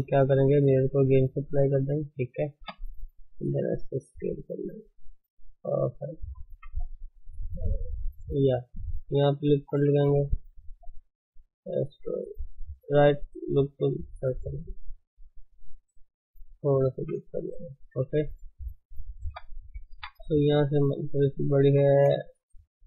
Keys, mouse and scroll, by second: 0.1 ctrl+space, 1.7-2.2 drag, 2.2 ctrl+space, 2.6 Tab, 3.2 s, 5.7 shift+middle click, 6.2 shift+z, 6.5 s, 8.5 shift+middle click, 9.2 shift+middle click, 10.3 ctrl+r, 14.2 right click, 14.2 s, 16.6 s, 16.7-17.1 scroll down 5, 17.1 Tab, 17.4-19.2 middle drag, 19.2 KP_3, 19.6 middle click, 19.6 scroll up 5, 19.9 Tab, 20.4 shift+z.